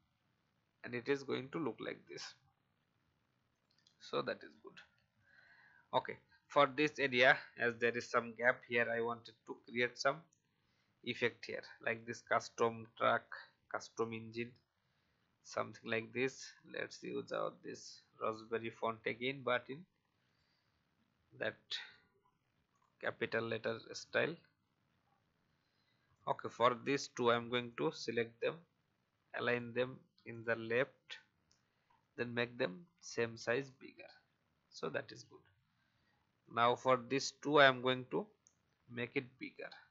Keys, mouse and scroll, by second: 1.2 alt+scroll up 1, 2.4 alt+scroll down 1, 3.5 click, 4.3 alt+scroll down 1, 5.2 click, 5.9-6.2 alt+scroll down 1, 6.6-9.6 scroll up 1, 9.6-10.3 scroll down 1, 10.4-10.8 alt+scroll up 1, 11.4 click, 14.3 right click, 17.3 click, 21.7 right click, 22.7 click, 25.0 alt+scroll up 1, 26.1-31.8 drag, 31.9-33.1 shift+drag, 33.8 shift+Down, 34.0 shift+Down, 35.1 click, 36.3 shift+click, 39.1 shift+click.